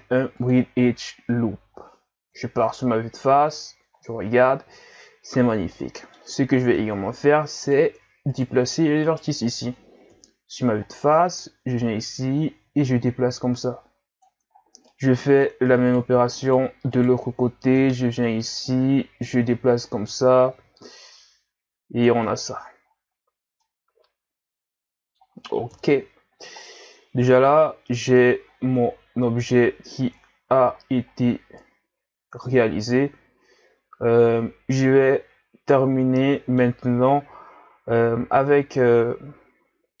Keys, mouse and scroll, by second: 1.5-2.4 scroll down 2, 2.4 KP_1, 3.6 Tab, 4.0-4.6 scroll down 5, 4.6-5.3 scroll up 4, 5.3 scroll up 2, 5.7-6.3 middle drag, 6.3-6.7 scroll up 1, 6.7 Tab, 7.6 right click, 8.3 shift+right click, 9.0 shift+right click, 10.1 KP_1, 10.9-11.8 scroll up 2, 11.8-14.6 drag, 14.6-14.9 scroll down 3, 14.9 middle click, 15.9 right click, 16.4 shift+right click, 16.9 shift+right click, 17.8 KP_1, 19.2-22.3 drag, 22.3 Tab, 22.8-23.6 scroll down 6, 23.6-25.7 middle drag, 25.7 KP_1, 26.6-28.4 scroll down 8, 28.4-29.3 scroll up 5, 29.3-30.2 scroll up 1, 30.2-30.8 scroll up 4, 30.8-31.2 scroll down 2, 31.2-34.2 middle drag, 37.0-37.6 scroll down 4, 37.6 Tab, 38.5-40.0 middle drag.